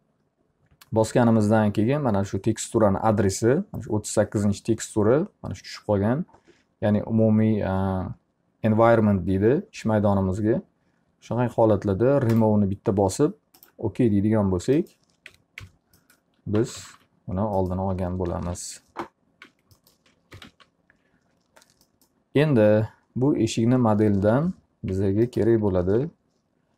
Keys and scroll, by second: 14.8 F3, 16.4-17.4 typing, 18.5-21.0 typing, 24.3 p, 24.9 z, 26.0 F3.